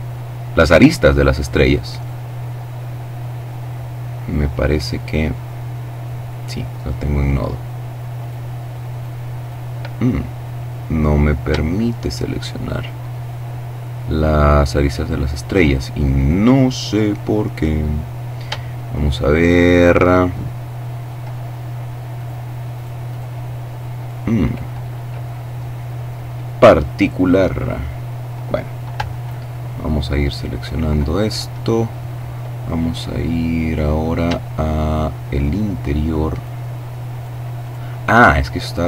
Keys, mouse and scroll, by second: 0.9 right click, 1.5 middle click, 3.9-5.8 middle drag, 7.1 right click, 7.8 right click, 9.4-9.9 scroll down 1, 10.0-10.7 scroll up 1, 10.7-15.1 shift+middle drag, 15.1 right click, 17.7-20.5 shift+middle drag, 21.0 right click, 22.0 right click, 22.7 right click, 28.0 l, 30.6-31.3 scroll down 2, 31.5-32.5 scroll up 2, 34.3 shift+right click, 35.1 right click, 35.9 right click, 37.2-37.8 scroll down 2, 38.3-38.8 scroll up 2.